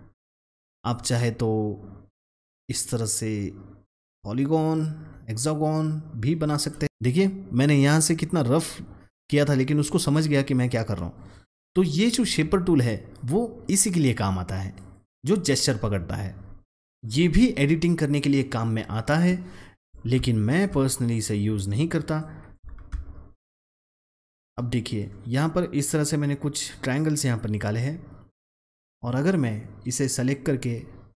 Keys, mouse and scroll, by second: 1.2-6.8 drag, 16.9-21.1 drag, 21.1-24.9 drag, 24.9-30.5 drag.